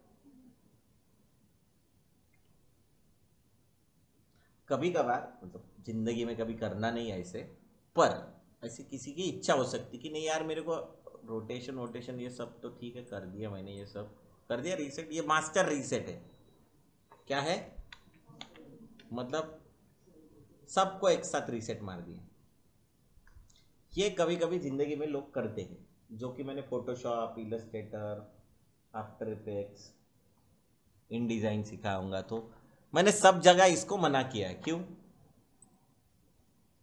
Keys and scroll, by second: 18.0 ctrl+z.